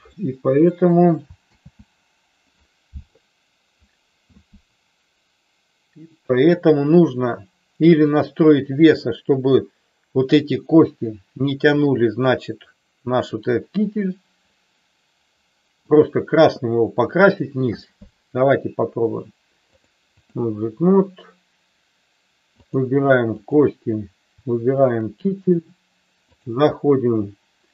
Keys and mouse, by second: 1.6 ctrl+z, 8.0 click, 11.8-16.0 middle drag, 19.9 click, 22.6 click, 23.6 click, 26.5-27.7 drag.